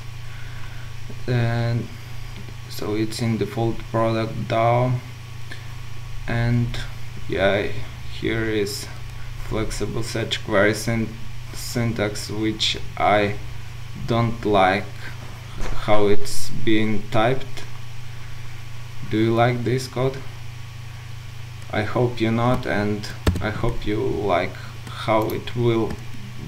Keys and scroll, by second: 23.3 ctrl+alt+super+b.